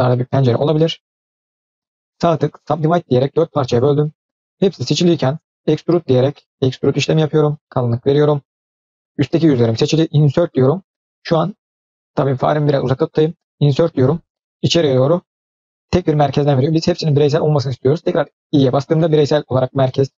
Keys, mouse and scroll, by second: 2.0-4.0 right drag, 4.6 middle click, 5.5 e, 7.5 middle click, 8.7-9.4 scroll up 1.